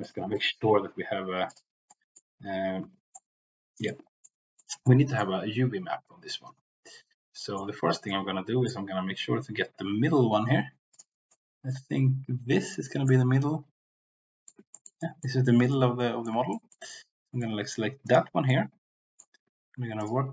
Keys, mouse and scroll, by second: 2.0 middle click, 2.8 Tab, 3.2 middle click, 4.1 middle click, 4.9 middle click, 7.4 middle click, 8.0 middle click, 10.8 alt+click, 11.3 middle click, 13.1-14.6 middle drag, 15.0 middle click, 15.6 middle click, 16.6 shift+middle click, 16.9 middle click, 18.4 middle click.